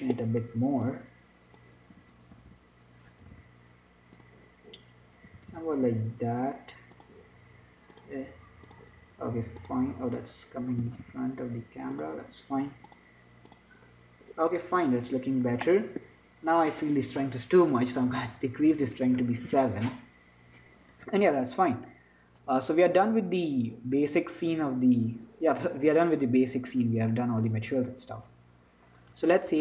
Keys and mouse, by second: 1.1-2.9 drag, 2.2 s, 5.7 r, 9.2-12.0 drag, 11.1 g, 13.1-14.9 drag, 17.1-18.5 drag, 23.7-25.5 drag.